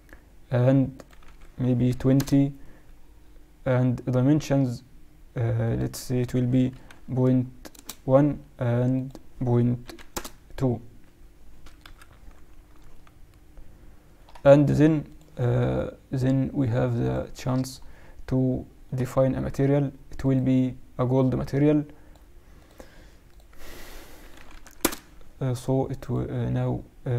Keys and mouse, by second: 11.8 KP_Decimal, 12.9-14.7 middle drag, 17.8-19.7 middle drag, 20.1-25.1 drag, 25.9-27.1 drag.